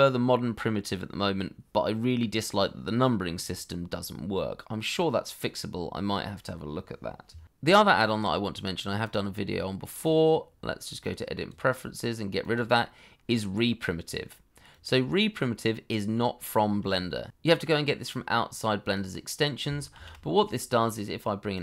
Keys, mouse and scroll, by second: 16.1-17.3 scroll down 1, 17.5-18.0 scroll up 1, 19.9 shift+a.